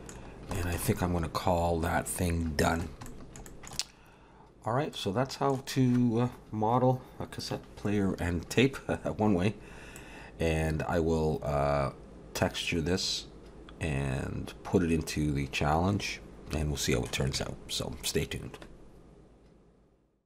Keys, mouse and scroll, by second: 0.2-0.6 scroll down 3, 0.6 shift+middle click, 0.9 middle click, 3.1 shift+middle click, 3.5 middle click, 4.1-4.9 scroll up 2, 4.9 middle click, 4.9-6.2 scroll up 1, 10.1 middle click.